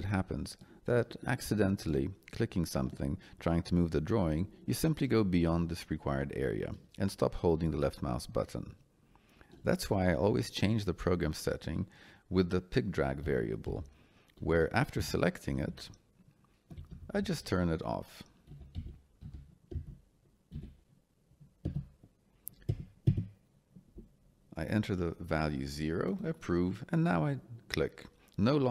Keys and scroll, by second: 13.2 p, 13.6 i, 16.7 BackSpace, 18.4 c, 18.7 k, 19.7 BackSpace, 20.5 d, 21.6 Return, 22.6 0, 23.0 Return.